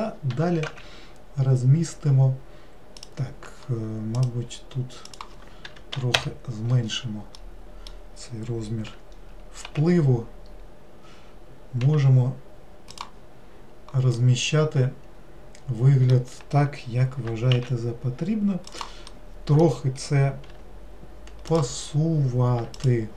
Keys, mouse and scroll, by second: 0.3 g, 4.2-7.4 drag, 7.4-8.9 middle drag, 8.9 g, 13.6-14.2 scroll down 1, 14.2-17.2 middle drag, 17.2 g, 19.2-20.5 middle drag, 20.5 g, 22.8 alt+click.